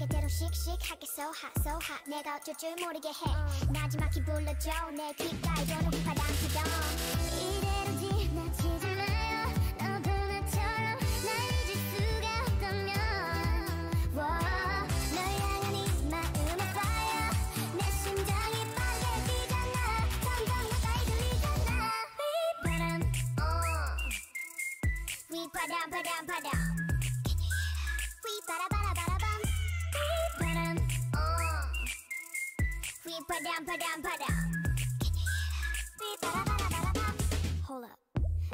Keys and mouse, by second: 2.8 ctrl+e, 3.6 a, 4.8 a, 5.1 u, 7.2 a, 7.5 l, 8.3 r, 9.7 g, 11.0 r, 11.8 g, 13.9-15.0 drag, 17.0 g, 18.0 r, 18.8 g, 20.7 r, 21.2 g, 23.1 a, 23.8 l, 24.2 g, 28.6 r, 29.5 g, 32.4 r, 33.3 r, 33.8 g, 36.1 a, 37.7 l.